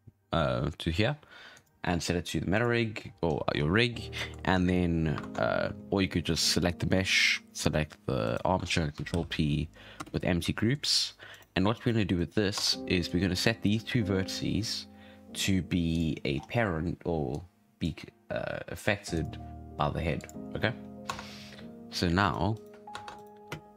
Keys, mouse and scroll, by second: 3.0 scroll up 1, 3.2 scroll down 8, 3.5 scroll up 7, 4.1-4.4 shift+middle drag, 4.4-4.9 scroll down 6, 4.9-5.2 scroll up 4, 5.2 ctrl+Tab, 5.7-7.0 scroll down 3, 7.0-8.2 shift+middle drag, 8.2 shift+right click, 9.1 ctrl+p, 10.5 shift+middle drag, 10.7-11.3 scroll up 2, 11.3 right click, 11.7 right click, 12.1 right click, 12.5 Tab, 13.0 click, 15.9 click, 16.3 scroll up 7, 17.3-18.0 drag, 18.0-19.1 scroll down 4, 19.1 click, 20.1 click, 20.6-21.0 scroll down 5, 21.0 Tab, 21.4-22.2 scroll up 1, 22.2 right click, 22.5 right click, 22.9 ctrl+Tab, 23.1 right click, 23.3 scroll down 1, 23.4 space.